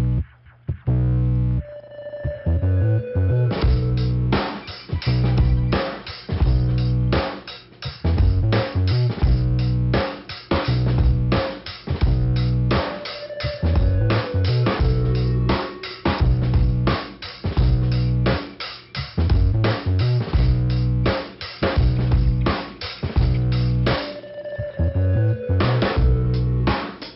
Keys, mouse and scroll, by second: 0.2 click, 0.8 click, 1.8 click, 2.6 right click, 7.8 right click, 8.7 click, 10.3 click, 10.6 click, 10.7 double click, 11.6 double click, 13.0 click, 14.3 click, 15.9 right click, 16.6 scroll down 2, 19.1 click, 20.3 ', 21.7 click, 23.7 click, 25.3 click.